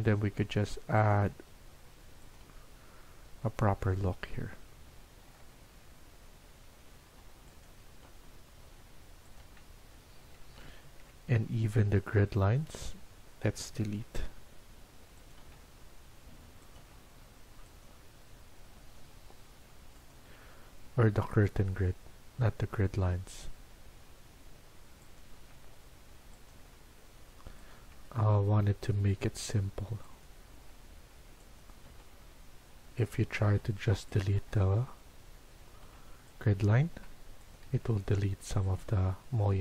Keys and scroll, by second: 0.2 Delete, 1.0 Delete, 2.4 Delete, 7.0 Delete, 8.1 Delete, 9.4 Delete, 13.5 Delete, 15.4 Delete, 16.7 Delete, 18.8 Delete, 25.2 Delete, 26.5 Delete, 27.8 Delete, 30.5 Delete, 31.8 Delete, 33.4 Delete, 34.2 Delete, 36.6 Delete, 37.8 Delete, 38.8 Delete.